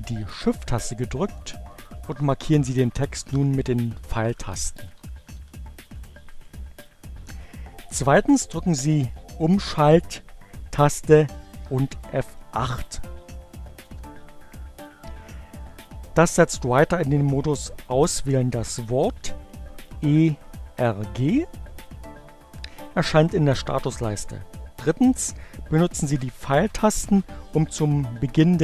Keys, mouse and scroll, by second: 1.1 shift+Right, 13.6 shift+F8.